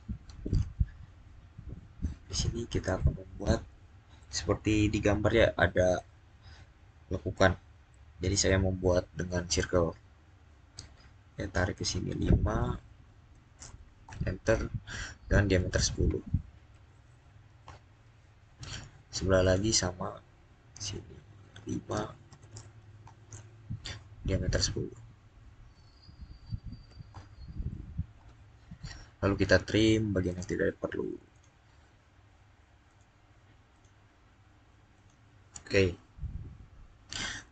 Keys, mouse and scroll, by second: 1.1-1.5 scroll down 1, 2.1-5.2 middle drag, 13.2 middle click, 13.9 Return, 15.4 1, 16.5 0, 17.5 Return, 22.1 click, 22.5 5, 22.9 Return, 25.2 Return, 26.6 0, 28.0 Return, 30.1 click, 36.6 scroll down 1.